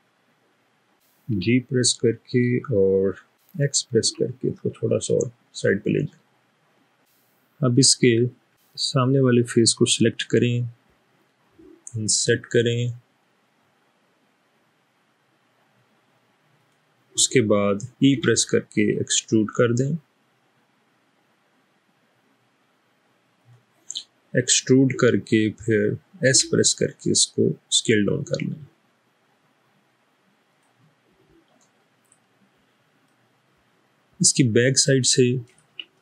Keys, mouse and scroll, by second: 0.3 middle click, 1.4 typing, 4.1 typing, 8.9 click, 12.3 i, 16.6 click, 18.3 e, 26.4 s, 34.2-35.4 middle drag.